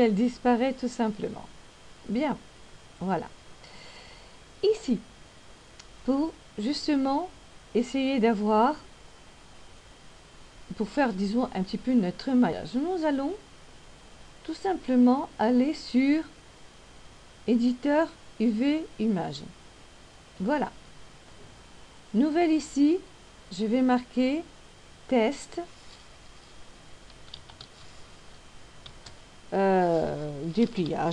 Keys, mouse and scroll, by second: 8.2 click, 23.9 click.